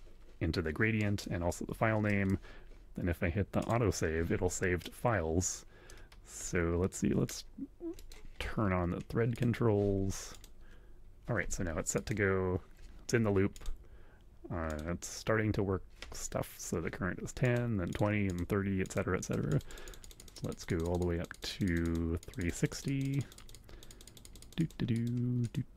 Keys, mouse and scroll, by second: 1.0 click, 2.1 click, 3.6 click, 4.8-5.9 middle drag, 6.4 click, 7.9 click, 9.3 click, 10.3 click, 11.9 click, 13.5 click, 14.7 click, 17.4 click, 17.9 click, 18.3 click, 18.7 click, 19.2-22.0 drag, 22.2-24.8 drag, 24.9 click, 25.4 click.